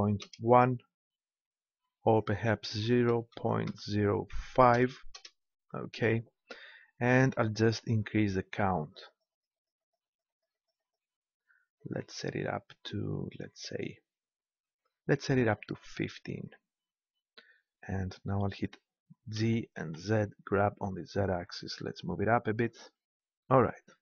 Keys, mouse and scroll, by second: 2.0-3.8 drag, 3.9 click, 7.6-17.4 drag, 19.4 g, 22.8-24.0 drag.